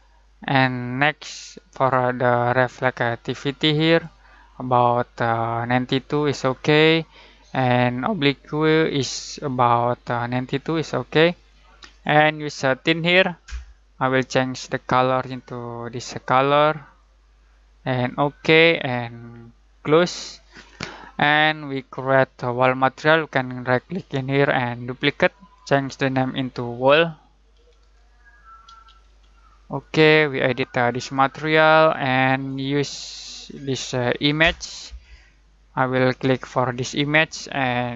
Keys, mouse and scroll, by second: 11.7-21.9 drag, 23.7 right click, 24.8 click, 27.3-29.1 typing, 29.5-34.2 drag, 36.7 click.